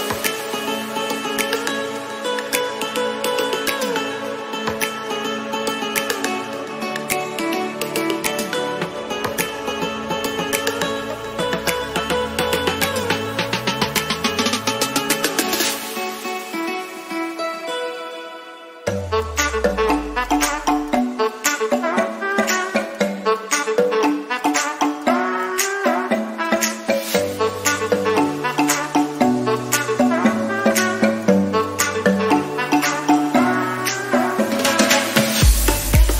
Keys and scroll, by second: 7.2 ctrl+alt+z, 15.4 ctrl+alt+z, 29.9 ctrl+alt+z.